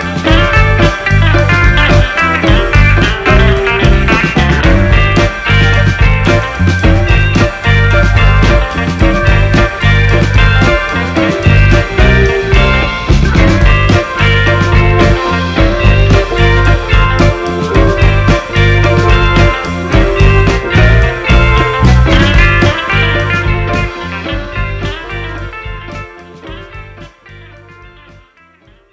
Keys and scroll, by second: 9.6 Delete, 18.1-19.8 typing, 20.0 Return.